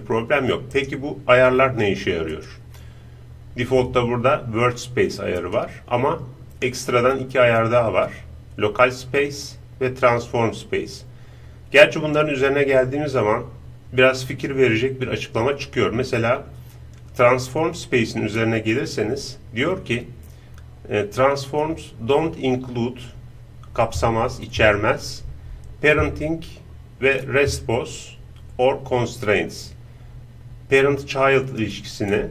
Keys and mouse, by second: 0.7-3.9 right drag, 2.3-4.6 drag, 5.3-11.0 drag.